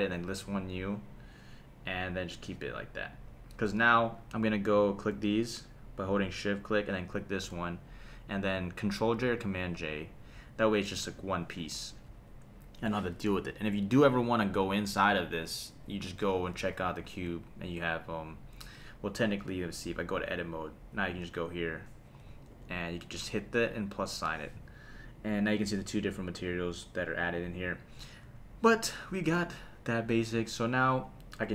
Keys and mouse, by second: 0.7 click, 2.2 click, 3.8 click, 4.7 click, 5.4 shift+click, 6.3 shift+click, 9.2 super+j, 10.7 click, 11.2 g, 12.1 Escape, 13.8 click, 15.7 click, 16.9 click, 17.6 click, 20.0 Tab, 21.5 click, 22.5 super+KP_Add, 26.1 click, 27.1 click, 28.2 Tab, 29.3 /.